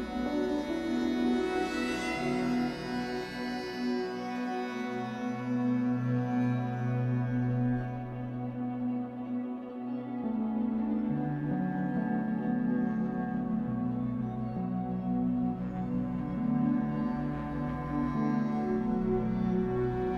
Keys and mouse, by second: 0.0-0.5 typing, 4.7 click, 8.4-11.0 drag, 11.5 ctrl+alt+click, 11.9 alt+shift+click, 12.6 alt+shift+click, 12.9 ctrl+alt+shift+click, 14.1 click, 15.4 click, 15.9 click, 18.1 click, 18.7-20.1 drag.